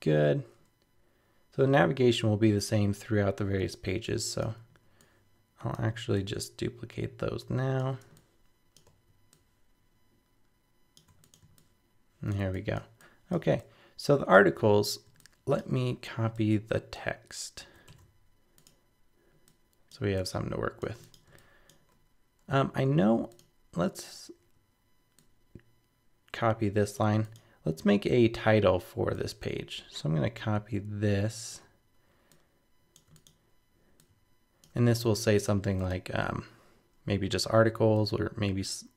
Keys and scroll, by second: 17.6 super+c, 17.9 super+v, 35.1 super+z.